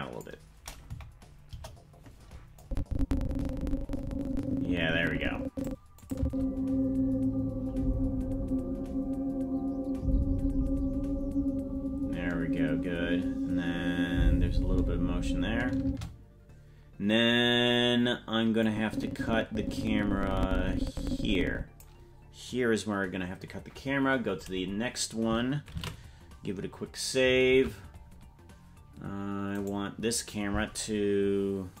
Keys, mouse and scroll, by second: 0.9 KP_Decimal, 1.5 KP_0, 2.6-5.7 drag, 6.0 click, 6.2 space, 15.8 space, 18.6-21.8 drag, 24.2-25.0 scroll up 11, 25.3-26.4 scroll up 1, 27.9 ctrl+s, 28.0 ctrl+Tab, 29.6-31.8 right drag.